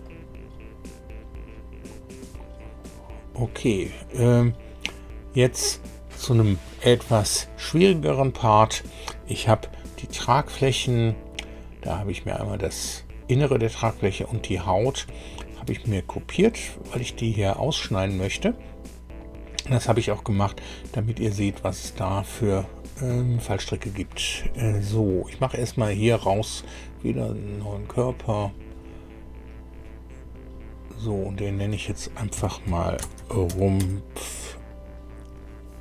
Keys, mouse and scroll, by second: 0.0-2.9 drag, 3.2 scroll down 2, 25.6 click, 27.1 click, 29.9 scroll down 2, 30.6 scroll down 2, 31.3 click, 32.3 F2, 32.7-34.2 typing.